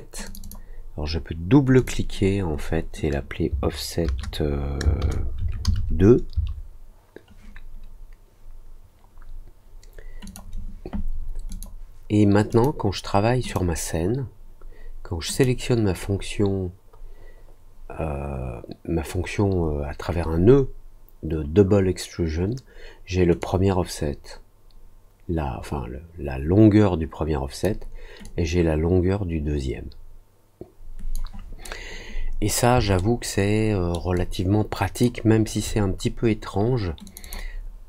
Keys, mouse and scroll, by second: 0.2 click, 0.4 click, 1.7 click, 10.2 click, 11.4 click, 12.4 click, 13.4 click, 15.3 click, 23.3-27.6 drag, 28.2-31.1 drag, 32.9 alt+middle click, 34.1 alt+click, 37.0 click, 37.2 click.